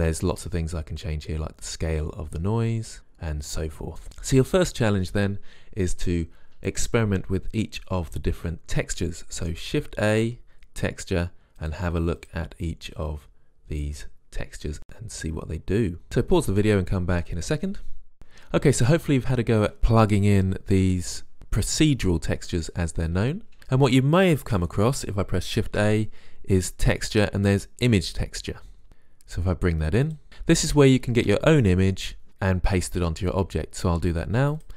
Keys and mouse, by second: 0.6 click, 1.1 click, 6.4-8.3 drag, 10.3 shift+a, 13.3-14.3 drag, 18.2 ctrl+z, 25.8 shift+a.